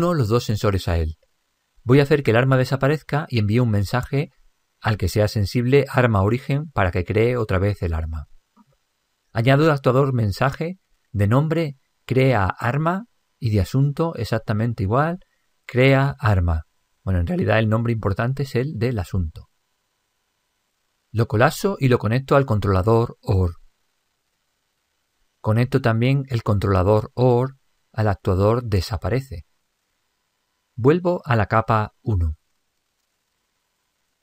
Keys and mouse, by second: 1.0 click, 1.2-3.0 middle drag, 8.9 click, 11.5 click, 15.8 click, 20.6-22.6 middle drag, 22.5-25.2 drag, 26.6 click, 32.1-34.2 drag.